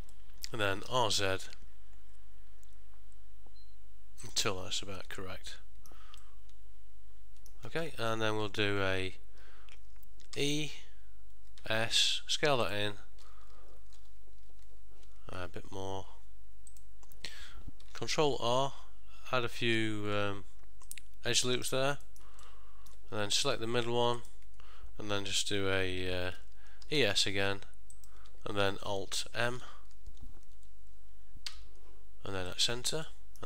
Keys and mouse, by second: 0.2 middle click, 1.0 r, 4.9 middle click, 6.3 middle click, 15.5 s, 18.4 ctrl+r, 22.1 middle click, 22.5 ctrl+middle click, 23.5 alt+click, 24.3 alt+click, 27.0 e, 31.6 alt+m, 33.2 middle click.